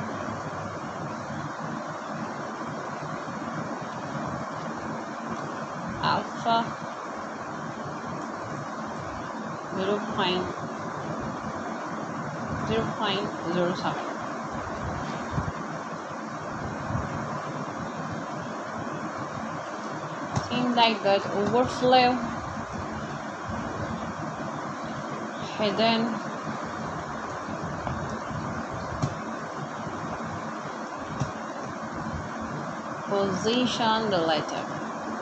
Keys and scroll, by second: 1.1 Right, 4.8 Return, 5.0-6.6 typing, 7.7 Return, 9.6 h, 10.1 o, 11.8 BackSpace, 12.1 i, 13.5 Return, 14.9 Right, 15.6 Return, 15.7-16.6 typing, 18.5 s, 20.5 Return.